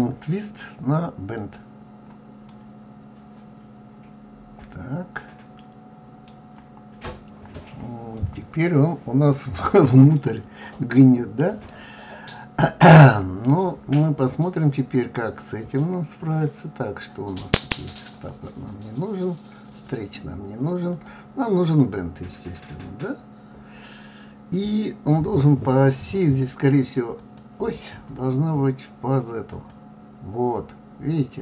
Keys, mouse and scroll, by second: 1.8 click, 2.9-6.0 middle drag, 7.0-7.8 scroll down 2, 7.8-8.6 scroll up 2, 8.6-11.6 middle drag, 12.8-13.4 scroll down 1, 13.4-14.2 scroll down 1, 18.6 click, 20.1 click, 21.4 click, 22.1 click, 27.6 click.